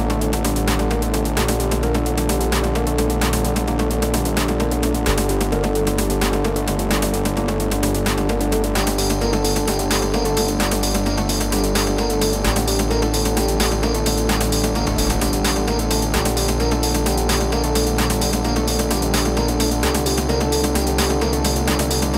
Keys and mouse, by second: 0.7 space, 0.7 click, 1.4 space, 1.5 click, 4.0 space, 4.1 click, 4.1 space, 4.9 z, 6.2-7.5 typing, 6.5 click, 7.1 click, 8.7 click, 11.5 click, 13.2 click, 14.3 right click, 14.7 click, 16.2 click, 17.0 click, 18.5 click, 19.7 click, 20.5 click, 21.6 click.